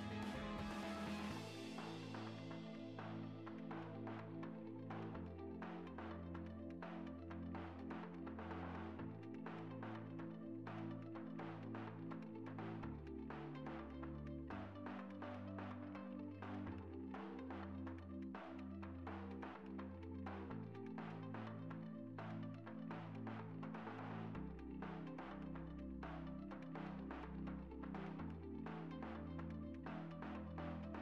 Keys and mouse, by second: 0.6 click, 1.9 a, 2.2 shift+d, 2.8 r, 3.4 click, 3.7 click, 3.9 click, 4.7 click, 5.3 click, 5.9 KP_3, 6.3 ctrl+s, 7.5 click, 7.7-8.8 typing, 9.7 click, 10.3 shift+d, 10.9 click, 11.2 r, 12.3 l, 12.6 shift+d, 13.1 r, 13.5 click, 13.9 click, 18.7 s, 19.2 shift+d, 19.4 shift+d, 19.8 click, 20.5 click, 21.4 r, 22.4 click, 24.1 middle click, 24.6 click, 25.1 KP_3, 25.3 click, 25.8 middle click, 26.5 click, 26.9 shift+d, 27.5 click, 27.7 s, 27.9 click, 28.2 KP_3, 29.7 click, 30.7-31.0 typing.